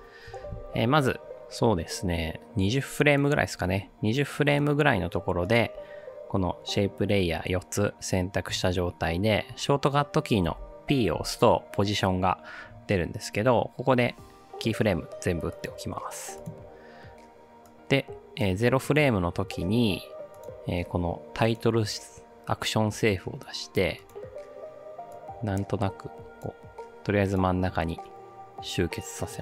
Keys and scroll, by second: 10.5 p.